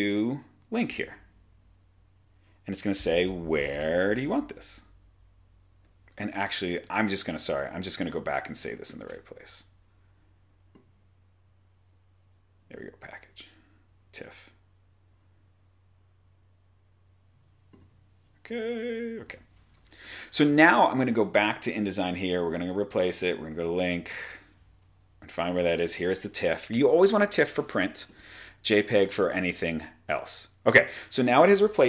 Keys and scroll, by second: 7.4 super+Tab, 9.0 shift+super+s, 20.1 super+Tab.